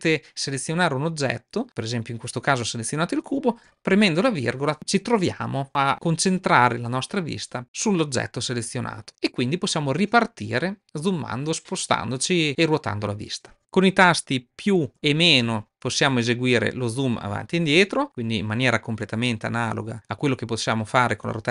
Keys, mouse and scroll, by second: 14.9 KP_Add, 15.4 KP_Subtract, 15.6 KP_Add, 15.8 KP_Add.